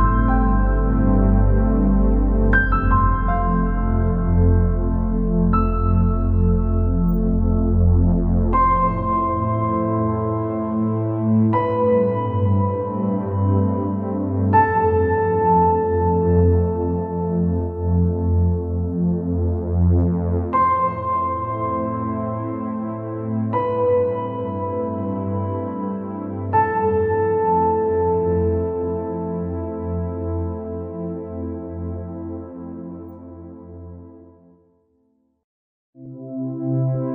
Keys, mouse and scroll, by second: 5.1-5.6 scroll down 5, 5.6 middle click, 6.2 scroll up 4, 6.6 scroll down 1, 6.6-7.7 middle drag, 7.7-8.3 scroll up 2, 8.3-10.3 middle drag, 10.3 ctrl+z, 10.9 scroll down 2, 11.4 scroll up 1, 11.9 scroll up 1, 12.5 scroll up 2, 13.4 click, 15.3 click, 17.0 alt+click, 18.0-20.3 drag, 21.1 click, 22.0-23.1 drag, 23.9-26.1 drag, 26.5 alt+click, 27.3-27.7 scroll down 3, 27.9 scroll up 1, 28.3 scroll down 1, 29.7 e, 34.0 alt+e.